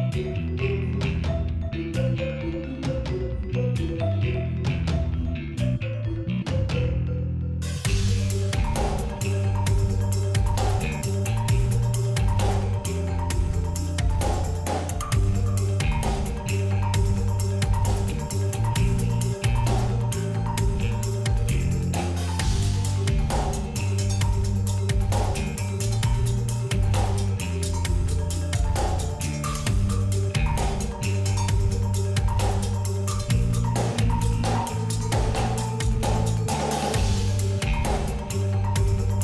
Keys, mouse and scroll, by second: 0.1 click, 0.7 alt+scroll down 1, 1.5 click, 3.2 alt+scroll up 1, 3.8 alt+scroll up 1, 4.2 space, 4.3 click, 4.7 space, 5.6 alt+scroll up 1, 6.7-12.5 drag, 11.0-12.5 drag, 12.7-13.8 drag, 17.2-18.5 drag, 18.9 alt+scroll up 1, 19.0 click, 19.4 alt+scroll down 1, 19.6 click, 19.7 alt+scroll up 1, 19.9 click, 21.0-21.6 alt+scroll down 2, 21.3 click, 21.7-22.3 alt+scroll up 2, 21.9 click, 22.4-23.8 drag, 23.8 click, 24.1 alt+scroll down 1, 24.4 space, 24.5 click, 24.6 space, 24.8 click, 24.9 alt+scroll up 1, 25.1-26.6 drag, 27.2 alt+scroll up 1, 27.4 click, 28.2 alt+scroll down 1, 28.4 click, 28.9 alt+scroll up 1, 29.1 click, 29.5 alt+scroll down 1, 30.0 click, 30.1-30.5 alt+scroll up 2, 30.3 click, 30.6 click, 31.0 alt+scroll down 1, 31.3 click, 31.5 alt+scroll down 1, 31.8-32.2 alt+scroll up 2, 32.0 click, 32.2 click, 32.5 shift+click, 32.9 alt+scroll down 1, 33.0 click, 33.3 alt+scroll up 1, 33.4 click, 36.0 alt+click, 36.1 alt+scroll up 1, 36.9 click, 37.6 ctrl+z, 38.4 click.